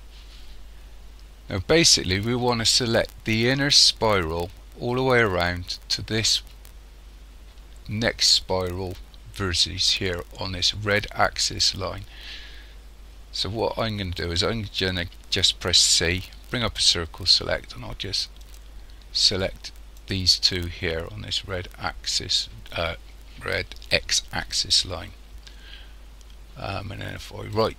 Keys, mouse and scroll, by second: 0.5-2.9 scroll down 1, 15.9 c, 27.6 right click.